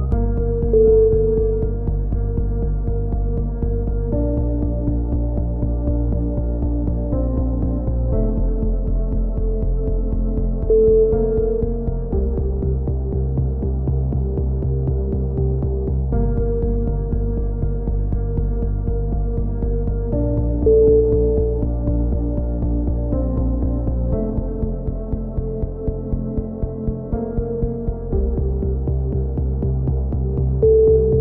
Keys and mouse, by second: 4.5 a, 4.7-5.7 right drag, 5.3 click, 5.7 click, 6.2-8.0 middle drag, 8.0 right click, 8.8 middle click, 9.5 click, 10.8 a, 11.0 click, 11.8 middle click, 12.2-13.7 drag, 13.7 middle click, 14.0 right click, 14.2 click, 15.9 ctrl+z, 16.3-18.5 drag, 17.6 right click, 18.5 a, 18.8-19.8 drag, 22.0 middle click, 22.6 click, 23.5 middle click, 23.8 k, 28.1 a, 29.6-30.8 middle drag, 30.8-31.2 right drag.